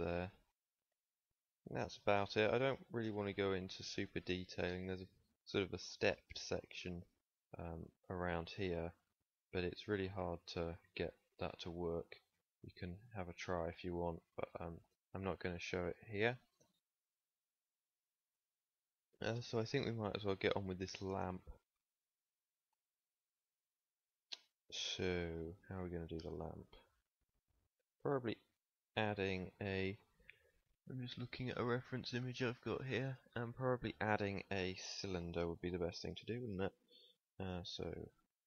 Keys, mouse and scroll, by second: 8.1 d, 8.3-10.1 drag, 10.1 d, 10.3 d, 10.6 d, 10.8-12.6 drag, 12.4 d, 13.1 Escape, 13.4 drag, 14.2 ctrl+s, 16.6 KP_1, 28.2 middle click, 36.8 shift+a.